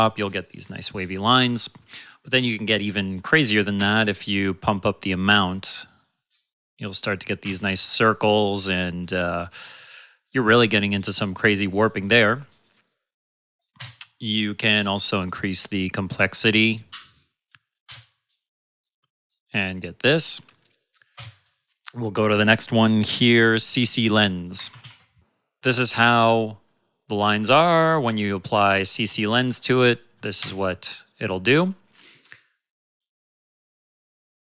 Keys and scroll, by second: 3.7 space, 7.4 space, 13.7 space, 17.8 space, 21.1 space, 24.5 ctrl+z, 24.7 shift+c, 30.3 space.